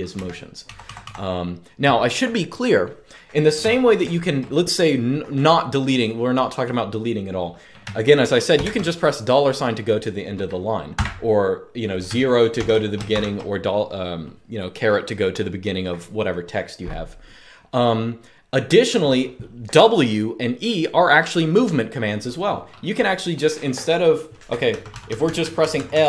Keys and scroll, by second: 0.0-1.2 typing, 8.3 typing, 10.7 typing, 12.3 typing, 24.4-26.0 typing.